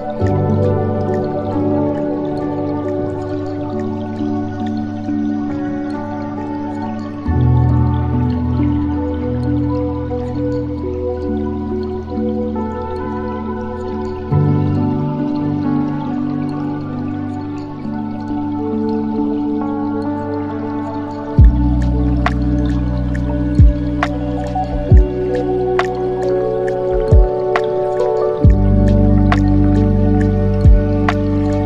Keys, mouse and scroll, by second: 3.5-3.9 scroll down 4, 3.9-4.9 middle drag, 4.9 space, 7.8 space, 8.5-10.3 middle drag, 10.3 KP_7, 11.3-11.8 scroll down 1, 11.8 shift+a, 13.7 s, 14.7 middle click, 15.4-16.1 scroll down 2, 16.1 g, 18.5 middle click, 19.4 s, 20.7-21.1 scroll down 3, 21.1 shift+a, 24.2 g, 26.1-26.8 scroll down 2, 26.8 g, 28.8 r, 30.7 s.